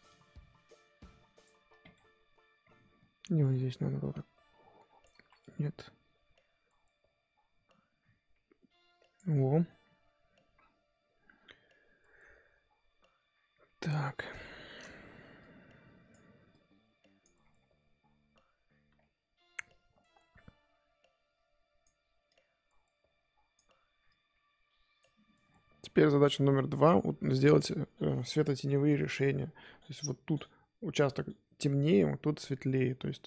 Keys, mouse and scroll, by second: 1.6-2.6 scroll down 5, 2.6-4.1 scroll up 6, 4.1-5.2 drag, 5.2 ctrl+z, 5.4-9.1 drag, 9.1 scroll up 1, 9.3-10.3 scroll down 8, 10.5-13.4 scroll up 3, 13.4-14.1 scroll up 6, 14.1-14.5 scroll up 3, 14.5 shift+middle click, 15.4-17.5 drag, 17.5-18.9 scroll down 5, 18.9-20.1 scroll up 3, 20.1-25.5 drag, 25.5-25.9 scroll down 5, 25.9-29.3 scroll up 4, 29.3-30.6 scroll up 2.